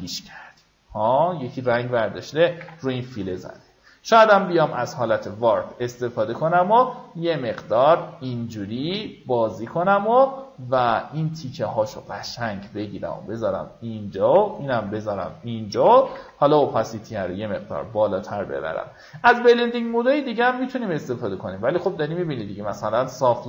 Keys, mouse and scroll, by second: 0.0-1.9 drag, 3.7 right click, 5.2-14.1 drag, 16.6 KP_8, 18.1 click.